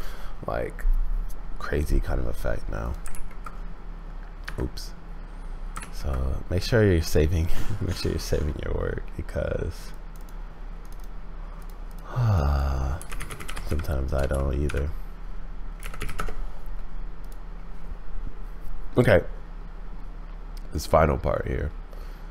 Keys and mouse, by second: 2.8 click, 3.2 ctrl+s, 5.9 ctrl+s.